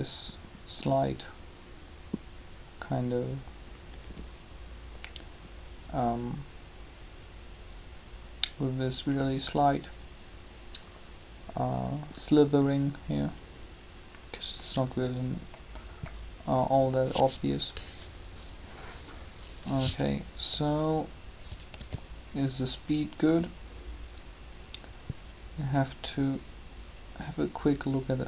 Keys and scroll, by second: 18.1 3, 21.6 alt+a.